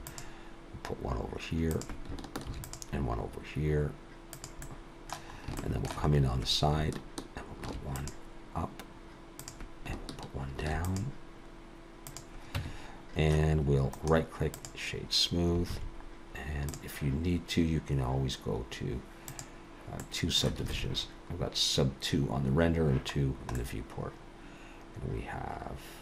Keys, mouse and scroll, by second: 2.5 ctrl+r, 4.6 middle click, 5.3 scroll up 2, 5.6 shift+middle click, 6.1-6.7 scroll up 1, 6.7 scroll up 1, 7.7 ctrl+r, 10.6 ctrl+r, 12.6 Tab, 14.0 right click, 15.7 alt+a, 16.1 scroll down 1, 16.7 click, 19.3 click, 20.0 middle click, 20.7 alt+a, 23.1-23.7 scroll down 3, 23.6 middle click.